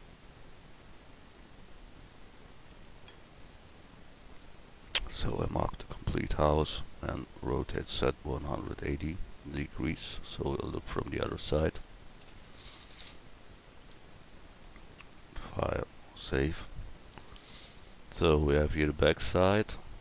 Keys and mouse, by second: 5.2 b, 7.5 r, 12.6 KP_1, 13.8 a.